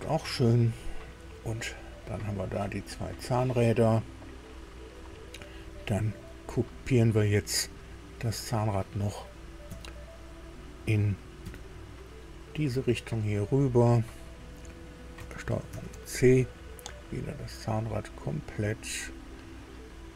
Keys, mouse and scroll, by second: 0.7-2.2 drag, 2.3 scroll down 2, 3.4-5.0 drag, 7.6 click, 9.7 KP_1, 11.4 KP_2, 15.7 ctrl+c, 18.0 click, 18.9-19.2 scroll down 2.